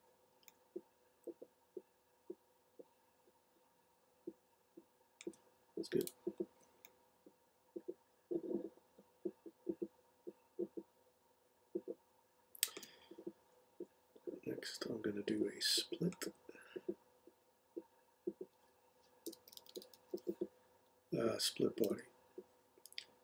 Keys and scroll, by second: 19.0-20.6 typing, 21.8 Return.